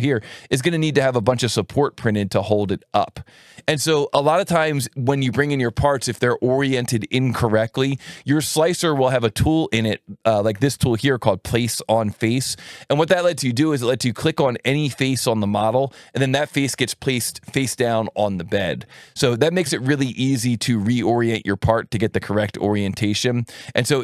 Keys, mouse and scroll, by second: 0.5 click, 1.0-5.5 drag, 7.9 alt+1, 11.8 click, 14.6 click, 16.0 click, 19.4 click, 20.5 click, 21.9 click, 22.9 click.